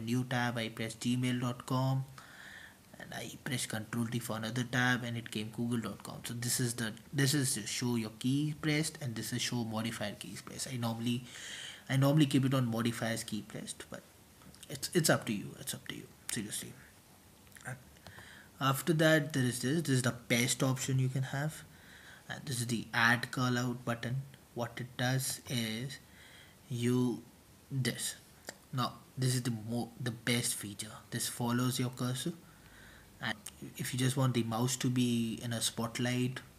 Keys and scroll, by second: 0.0-1.5 typing, 3.1 super+t, 4.8-6.2 typing, 20.9 super+t, 21.2-22.0 typing, 22.1 super+t, 27.8 super+t, 35.8-36.5 typing.